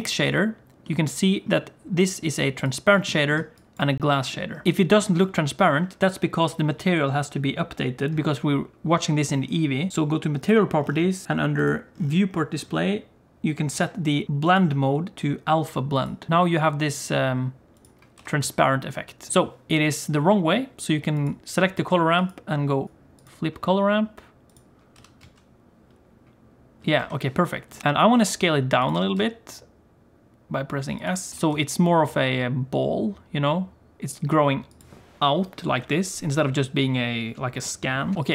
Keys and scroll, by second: 18.1 g, 22.8 ctrl+z, 24.9 g, 28.1 s, 28.9 g, 31.3 s, 38.1 alt+a.